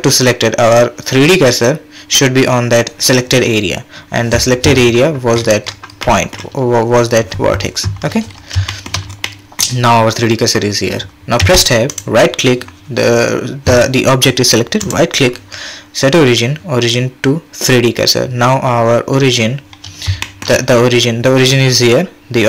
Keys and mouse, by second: 6.1 click, 8.7 shift+click, 9.2 click, 11.4 Tab, 11.9-12.6 right drag, 14.8-19.3 right drag, 20.2 shift+click.